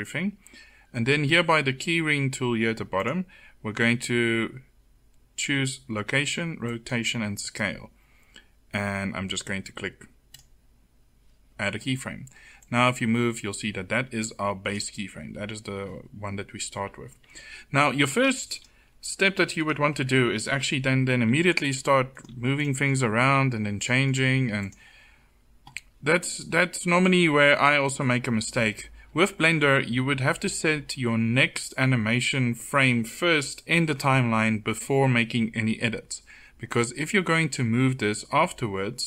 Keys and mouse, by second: 4.5 click, 10.2-12.5 drag, 14.1-18.4 drag, 21.0 r, 22.2 r, 23.2 r, 24.1 r.